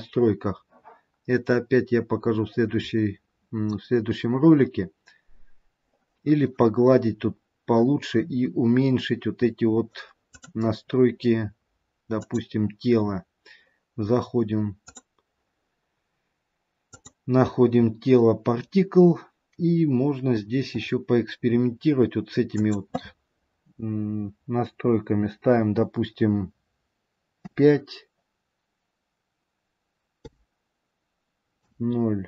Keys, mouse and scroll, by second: 1.4-4.3 scroll down 1, 5.2-6.7 scroll up 1, 10.2 click, 13.0 click, 17.5 click, 19.9-20.7 scroll down 1, 20.7-22.5 scroll down 14, 21.1-22.5 scroll up 1, 22.5 click, 22.5-24.1 scroll down 1.